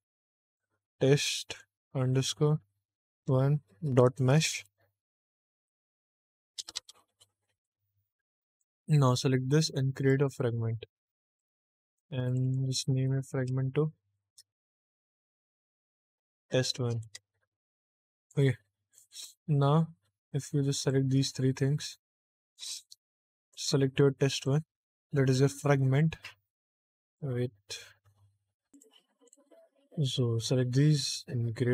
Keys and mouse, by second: 6.7 BackSpace, 8.4 click, 9.9 click, 11.2 click, 12.2 click, 12.3-16.9 drag, 18.8 click, 20.7 shift+click, 23.4 click.